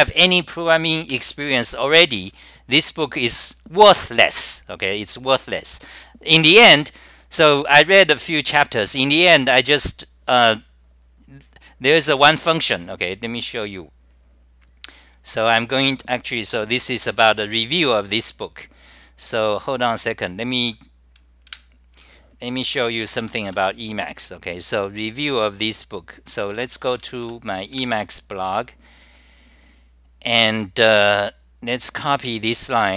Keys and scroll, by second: 0.8 scroll down 9, 3.6 scroll down 9, 6.8 scroll down 9, 10.0 scroll down 9, 10.0 typing, 13.2 scroll down 9.